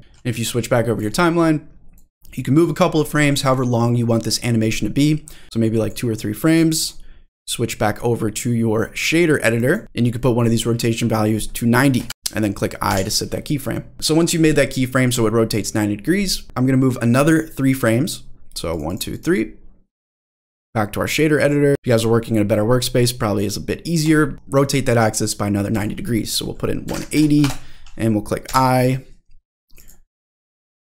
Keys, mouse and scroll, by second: 0.0-1.0 drag, 0.0 middle click, 2.0 click, 5.3 click, 6.8-7.4 drag, 9.6 click, 9.9-12.1 drag, 12.1 ctrl+z, 12.9 i, 18.7 click, 19.1 click, 19.9-21.7 drag, 22.9 middle click, 24.0 click, 25.7-29.0 drag, 28.5 i, 29.7 click, 30.4-30.8 drag.